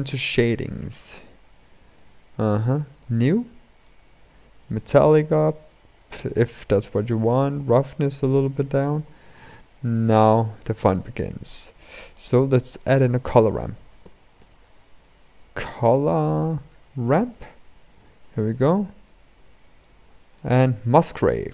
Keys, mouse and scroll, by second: 0.6 r, 2.8-8.4 drag, 8.4-8.9 scroll up 2, 8.9-19.6 shift+middle drag, 19.6-20.2 drag, 20.3 shift+a.